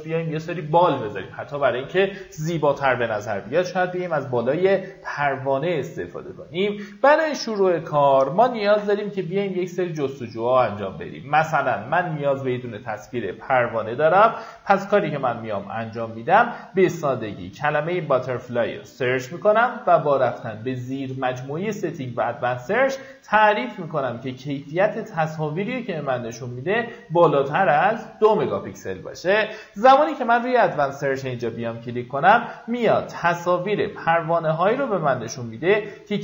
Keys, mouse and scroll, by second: 11.0 click, 16.1-16.9 scroll down 1, 16.9 click, 17.7-18.0 scroll down 1, 19.0 click, 19.5-20.0 scroll up 1, 23.3-27.0 scroll down 1, 28.6 click, 31.7 scroll down 1.